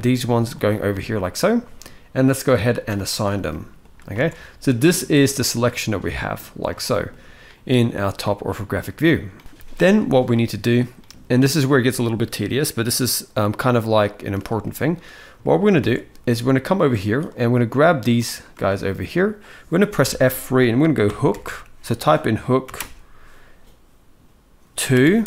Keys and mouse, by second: 2.2 click, 2.4 click, 2.6 click, 3.2 shift+middle click, 3.9 alt+a, 4.8 click, 6.5 shift+middle click, 8.0 shift+middle click, 10.1 shift+middle click, 13.5 shift+middle click, 14.3 shift+middle click, 15.1 shift+middle click, 15.6 alt+a, 17.1 click, 18.3 shift+middle click, 19.7 F3, 21.1 o.